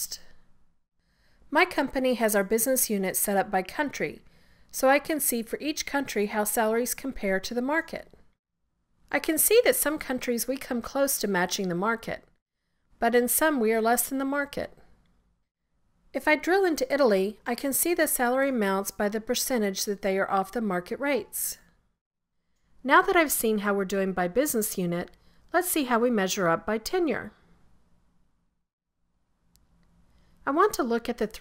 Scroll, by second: 26.8 scroll down 2.